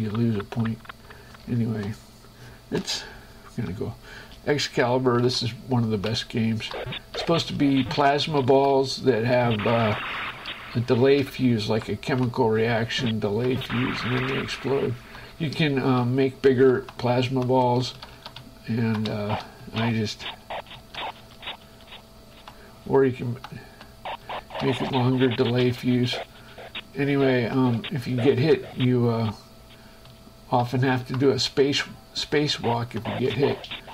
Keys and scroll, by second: 2.0 shift+Escape, 3.4 Down, 4.4 space, 5.1 Right, 5.5 Up, 6.0 Right, 6.4 Up, 7.0 Left, 7.7 space, 8.5 Left, 9.0 Up, 10.0 Right, 10.2 space, 10.5 Left, 11.5 Up, 12.2 Right, 12.7 Up, 14.0 space, 14.2 Left, 14.9 Right, 15.7 Left, 16.4 Up, 17.0 Right, 17.5 shift+Print, 18.2 shift+Print, 18.7 shift+Up, 19.2 shift+Print, 19.5 Left, 19.9 Right, 20.1 space, 21.0 Left, 21.5 space, 22.7 Right, 23.4 shift+Right, 23.7 shift+Print, 24.5 Left, 25.0 space, 27.4 Right, 28.0 Up, 30.4 Left, 31.0 Up, 31.5 Left, 33.0 Right, 33.5 space.